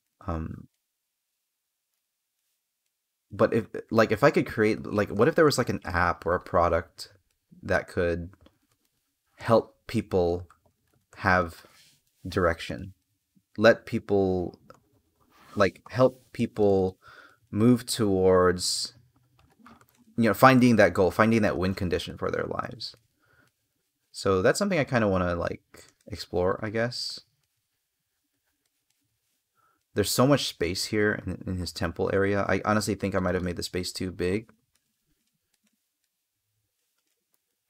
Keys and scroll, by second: 4.5 space, 8.5 space, 10.9 space, 16.1 space, 20.3 space, 22.7 space, 37.4 space.